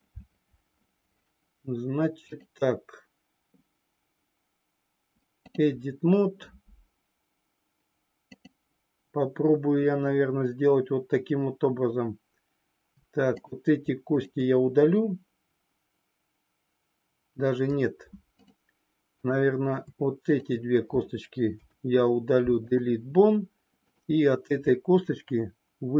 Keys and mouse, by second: 2.2-12.8 drag, 19.0 click, 20.2 shift+click, 21.4 Delete, 23.8 click.